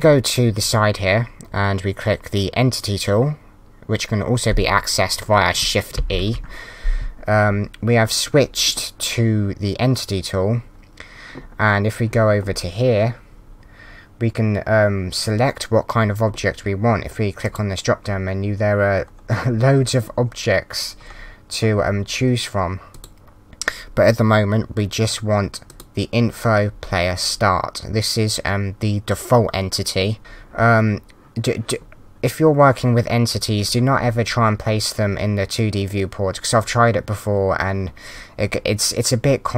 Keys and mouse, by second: 6.4 shift+e.